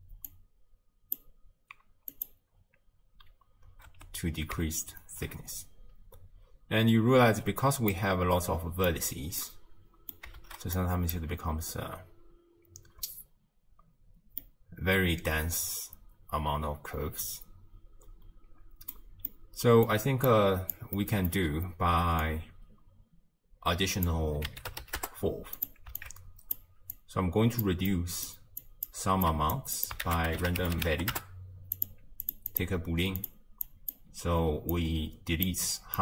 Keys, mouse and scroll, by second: 1.5 click, 2.5-4.1 drag, 4.1 space, 7.6 space, 8.0-9.3 middle drag, 9.3 scroll up 1, 9.5-10.5 middle drag, 10.5 shift+space, 10.8-11.2 middle drag, 11.2 space, 13.2 space, 14.6-17.4 middle drag, 20.3-24.1 drag, 26.0 alt+click, 29.3-31.3 drag, 31.3 ctrl+a, 32.3 click, 33.4-35.7 drag.